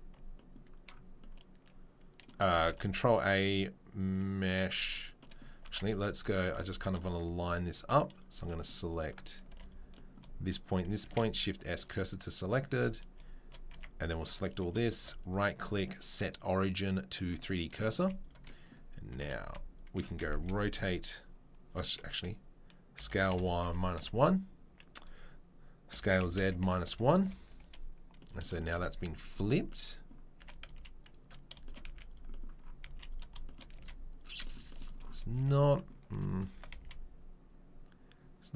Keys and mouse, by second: 2.5 shift+a, 6.5 2, 8.1 click, 9.5 1, 10.6 shift+right click, 10.7-15.1 shift+middle drag, 11.0 shift+s, 12.7 a, 13.7 Tab, 15.1-20.3 right drag, 19.1 s, 20.3-33.0 middle drag, 20.3 s, 25.9 s, 30.4 s, 31.8 z, 32.8 z, 33.0 right click, 33.2-38.5 shift+middle drag, 33.7 z, 35.3 Tab, 36.1 a, 36.5 s.